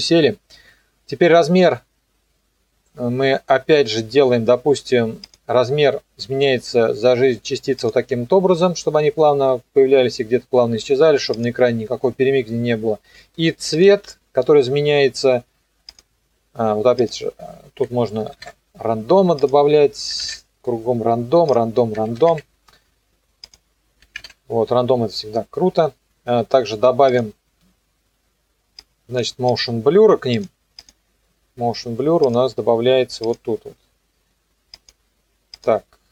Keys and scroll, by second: 18.2 KP_8, 18.4 KP_Enter, 20.1 KP_3, 20.2 KP_Enter, 21.9 KP_2, 22.1 KP_5, 22.3 KP_Enter, 24.0 KP_3, 24.2 KP_Enter.